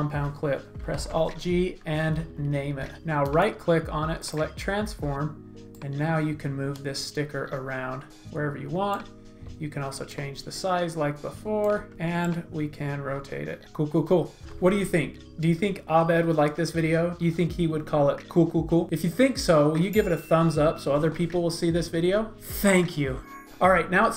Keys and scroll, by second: 1.0 alt+shift+g, 2.0 alt+shift+g, 11.9 super+x.